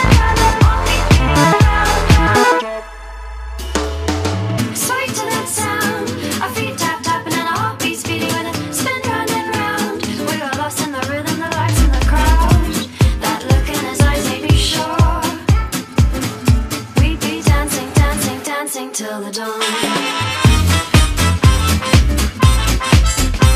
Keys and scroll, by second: 2.8 space, 6.1 space.